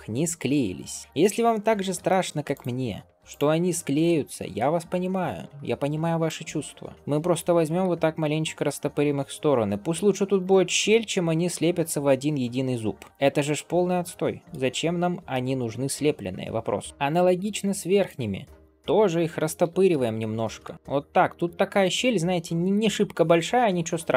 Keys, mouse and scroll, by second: 0.1 Tab, 0.6 scroll up 2, 1.9 shift+middle click, 3.0 click, 3.6 middle click, 3.6 click, 5.5-6.6 drag, 7.4 g, 10.9 Tab, 11.4-13.0 scroll down 2, 13.0 click, 13.0 scroll down 1, 13.1 scroll up 1, 13.2-14.5 middle drag, 14.5-15.2 scroll up 3, 15.2-17.9 middle drag, 17.9-19.5 drag, 19.5 g, 20.7 Tab, 20.7-21.3 scroll down 2, 21.3-21.8 drag, 21.8-22.1 scroll up 2, 22.1-23.7 middle drag, 23.7 scroll down 2.